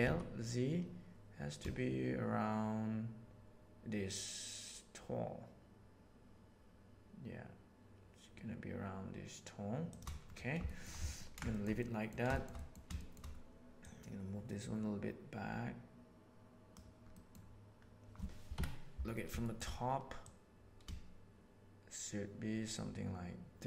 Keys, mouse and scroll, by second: 10.6 shift+middle click, 11.1 ctrl+middle click, 11.4 shift+middle drag, 11.7-12.1 middle drag, 12.3-12.7 shift+middle drag, 12.9 shift+middle drag, 13.8-16.7 drag, 17.0 middle drag, 18.5 KP_7, 19.4 shift+middle click, 20.2 click, 21.0-23.5 shift+middle drag.